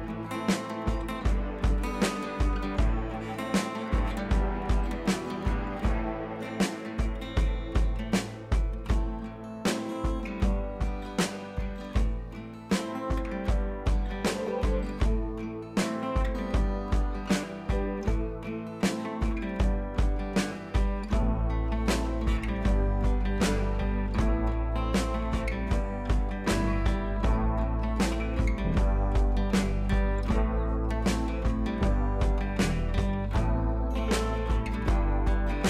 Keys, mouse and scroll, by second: 0.4-1.5 drag, 2.3 ctrl+a, 3.0 click, 3.5 ctrl+z, 4.2 ctrl+d, 5.2-6.2 scroll up 1, 6.8-8.0 drag, 10.6-11.2 scroll down 1, 11.2-12.3 drag, 12.4-12.9 scroll up 2, 13.6-14.2 drag, 15.1-15.9 scroll down 1, 15.9-19.2 drag, 20.6-21.5 scroll up 1, 21.5 scroll up 1, 21.6 ctrl+t, 22.0 click, 22.3 ctrl+t, 22.8-23.9 drag, 24.2 ctrl+z, 25.0-25.3 scroll up 2, 25.4 ctrl+t, 26.1-27.3 shift+drag, 27.4 scroll down 1, 28.2-28.8 shift+click, 29.4 scroll up 1, 29.6 click, 29.7 Up, 31.2-31.6 scroll down 1, 31.6 click, 33.6-34.6 scroll down 1.